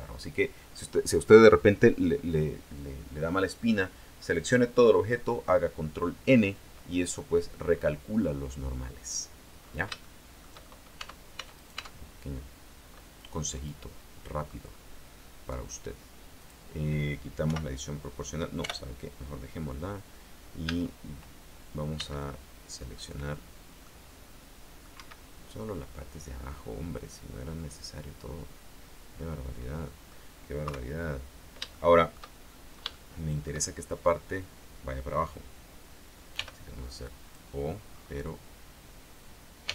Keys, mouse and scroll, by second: 7.4 scroll down 1, 7.8-8.3 scroll up 2, 9.7-10.1 scroll up 3, 10.2 shift+middle click, 11.1 shift+Tab, 11.7 right click, 13.5-14.8 middle drag, 16.5 click, 17.6 o, 18.7 o, 20.8 a, 22.1 c, 22.3 click, 24.0-25.1 middle drag, 25.1 Escape, 25.9-30.4 middle drag, 30.8 KP_3, 31.5-31.9 scroll down 1, 31.9 shift+middle click, 32.5-33.1 shift+scroll up 4, 33.1 shift+middle click, 36.5 g, 37.2 click, 37.3-37.7 scroll up 1, 38.1-38.4 scroll down 1.